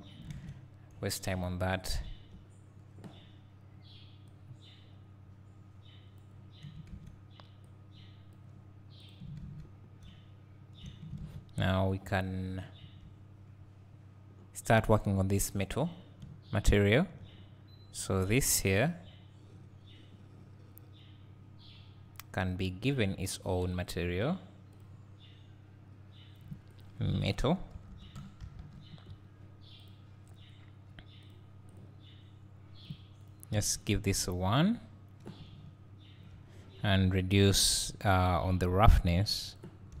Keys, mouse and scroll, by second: 0.0-0.4 scroll up 1, 0.4 ctrl+s, 0.8 scroll down 1, 0.9 `, 4.4-15.4 drag, 15.4 `, 18.1 click, 23.9-31.6 drag, 31.7 drag, 32.9-34.3 drag, 35.5 `, 38.3-40.0 drag.